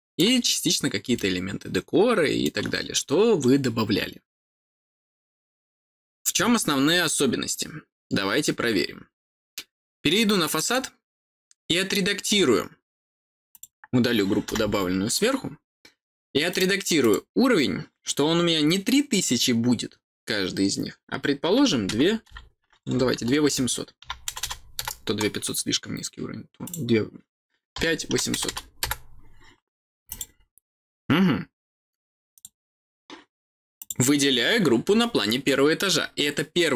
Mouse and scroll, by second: 0.4-2.4 middle drag, 10.4 click, 10.6 click, 13.4 click, 16.4 click, 16.9 click, 26.6 click, 30.0 click, 32.3 click, 33.7 click, 34.6 scroll down 1, 34.9 middle click.